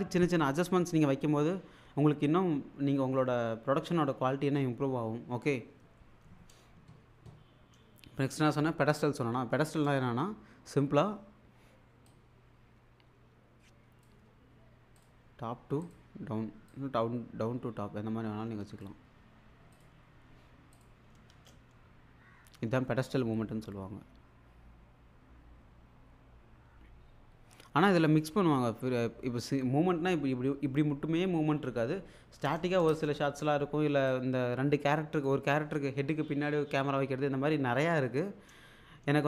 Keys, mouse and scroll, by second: 12.1-14.3 drag, 21.3 space, 32.9 space, 34.1-35.3 drag.